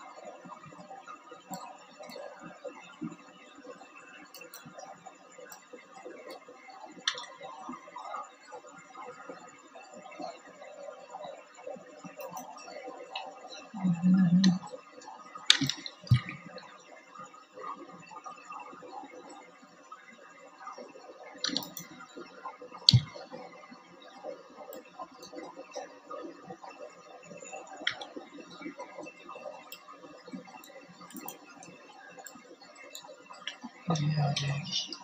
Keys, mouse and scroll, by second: 2.8 middle click, 3.0-7.4 drag, 7.7 click, 15.7-16.9 drag, 20.1 alt+click, 27.3 Tab, 29.7 click, 30.2 click, 30.9-35.0 drag, 32.8 KP_1.